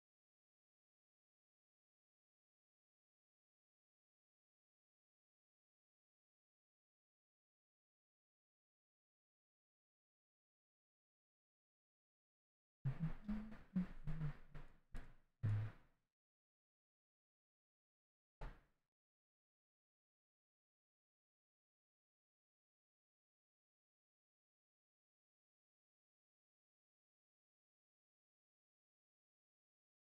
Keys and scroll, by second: 5.1 s, 25.2 w.